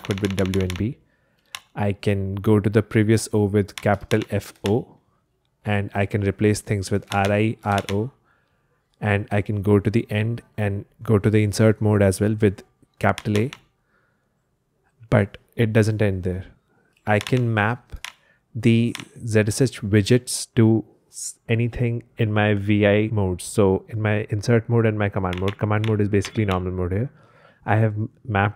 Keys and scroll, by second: 0.0-4.5 typing, 6.8-8.2 typing, 13.2 shift+a, 17.1 super+h, 17.9 j, 18.8 Escape, 25.0-26.9 typing.